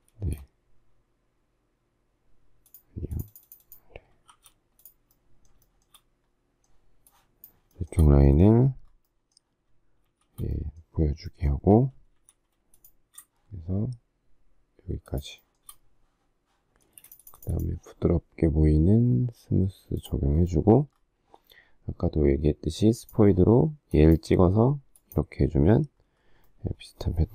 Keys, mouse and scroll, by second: 0.2 space, 4.3 shift+r, 5.8 shift+middle click, 7.7 shift+middle click, 10.1 shift+s, 12.1 m, 12.9 click, 15.1 shift+click, 15.4 shift+middle click, 15.5 shift+double middle click, 16.9 space, 17.0 shift+double middle click.